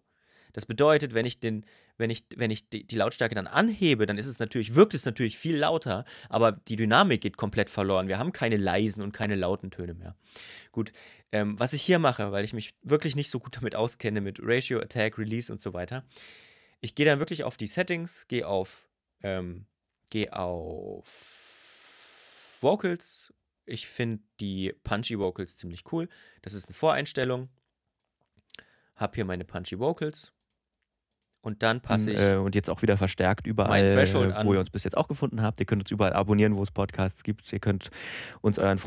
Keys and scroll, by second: 31.7 space.